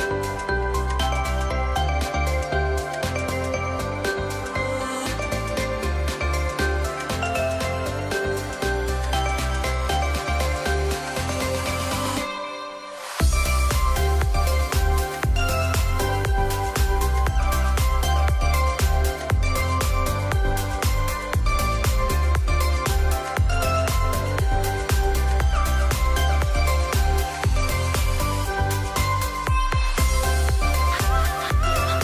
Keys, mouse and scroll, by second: 0.2 alt+scroll down 1, 1.4 alt+scroll up 1, 2.7-5.2 drag, 8.1 click, 10.9-11.8 drag, 14.1 shift+click, 16.5 right click, 22.1 click, 25.2 ctrl+t, 27.1-30.5 alt+drag, 31.4-32.0 drag.